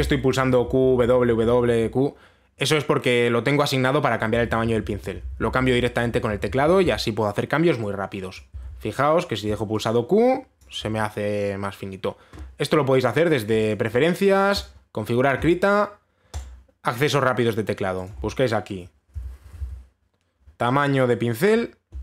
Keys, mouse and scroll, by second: 0.3-2.3 typing, 4.7-7.6 typing, 9.0-10.0 drag, 9.1 q, 9.3-10.1 q, 11.2 click, 15.2 click, 17.0 click, 18.6 click, 19.6-20.7 typing.